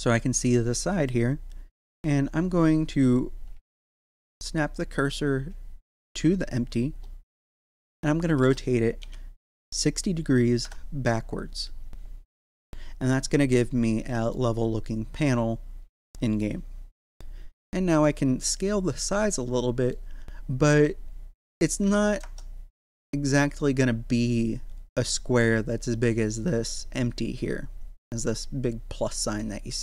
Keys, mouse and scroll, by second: 3.6 shift+s, 4.6 click, 7.9 r, 13.6-18.0 middle drag, 18.0-21.6 middle drag, 21.6 click, 26.9-29.8 middle drag.